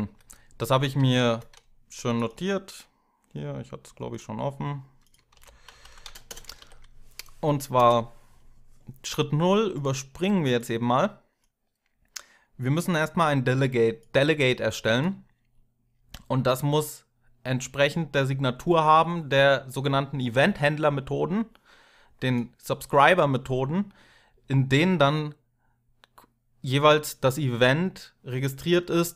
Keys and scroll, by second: 0.7 alt+super+d, 5.1 ctrl+a, 5.5 ctrl+c, 6.2 Down, 6.2 Up, 6.2 Return, 6.4 ctrl+v, 7.5 Return.